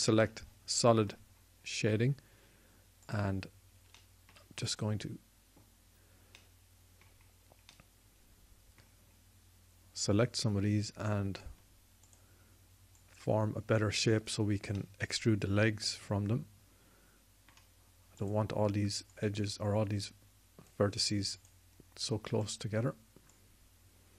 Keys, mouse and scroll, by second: 0.3 z, 3.8-7.1 drag, 7.7 middle click, 10.8 click, 22.4 click.